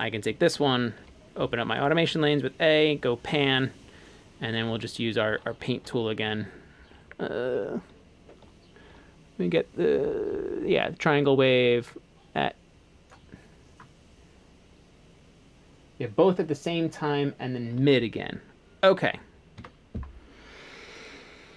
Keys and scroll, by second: 1.0 a, 5.9 5, 7.9 5, 19.6 a.